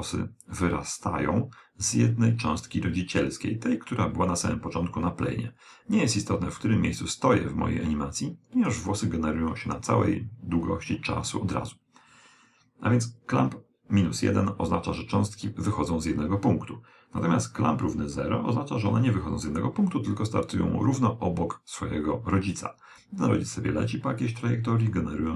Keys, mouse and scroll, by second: 6.7 click, 17.3 click.